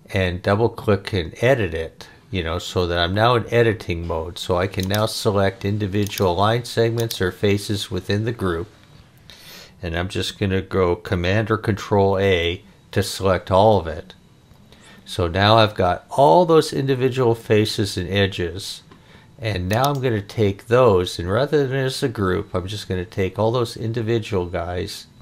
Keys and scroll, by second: 12.0 super+a.